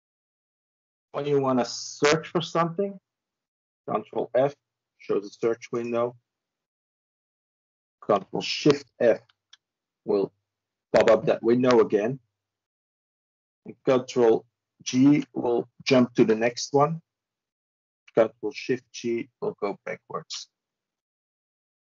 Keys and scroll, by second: 1.0 ctrl+f, 9.0 ctrl+shift+f, 14.6 ctrl+g, 16.0 ctrl+g, 18.7 ctrl+shift+g, 19.5 ctrl+shift+g.